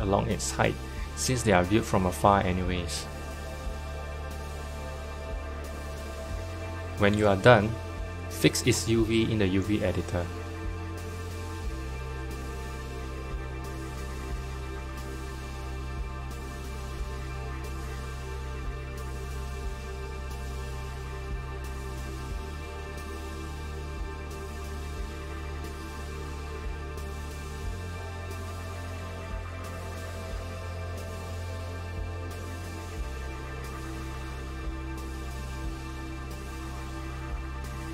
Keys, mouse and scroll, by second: 0.7 Tab, 1.5 click, 2.3 s, 4.6-5.1 scroll down 2, 5.1 middle click, 5.7 Tab, 8.5-9.6 drag, 9.6 shift+middle click, 10.1-10.6 scroll up 2, 10.6-12.1 shift+middle drag, 12.1 l, 16.1 g, 22.3 click, 23.3 s, 27.7 g, 30.9-31.9 scroll up 2, 31.9 KP_Decimal, 32.6-33.9 middle drag, 33.9 s.